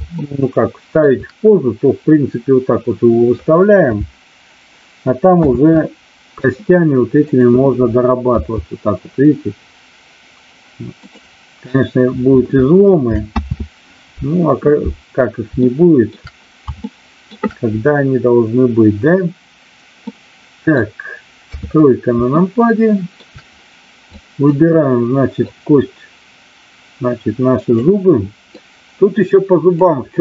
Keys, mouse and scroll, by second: 0.1-1.0 shift+middle drag, 5.3 ctrl+z, 8.4 r, 13.3 ctrl+z, 15.5-16.0 middle drag, 16.8-17.4 shift+middle drag, 20.0-20.8 middle drag, 21.4 KP_3, 22.3-23.1 shift+middle drag, 24.1-24.5 drag, 25.5-27.8 drag, 28.4-29.7 drag.